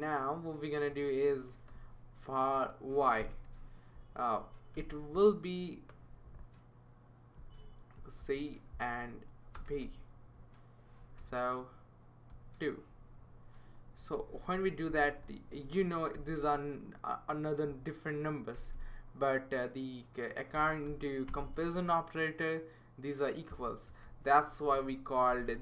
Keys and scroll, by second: 0.6-3.7 typing, 4.7 =, 8.0 super+c, 9.6 space, 9.8 super+v, 11.2 BackSpace, 12.3 2, 14.2 Up, 14.9 ;, 15.3 Down, 16.1 ;, 17.2 Down, 18.6 Return, 18.7 Return, 20.5-20.9 typing, 21.3 Return, 22.5-25.6 typing.